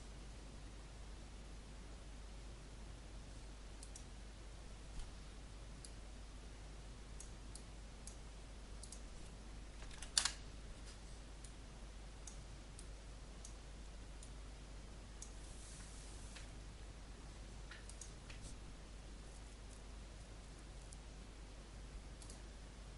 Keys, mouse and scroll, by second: 9.7 KP_1, 9.8 KP_5, 11.4-15.5 drag, 15.6 click.